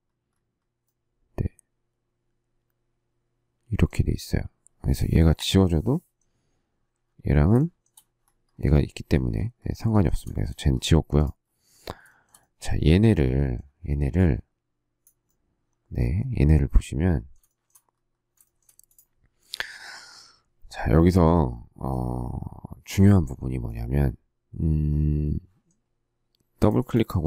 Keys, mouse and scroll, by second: 5.3 Delete, 7.5 shift+middle click, 9.9 shift+middle click, 10.2 shift+middle click, 12.1 shift+middle click, 17.4 shift+middle click, 18.4 shift+middle click, 18.6 shift+scroll up 1.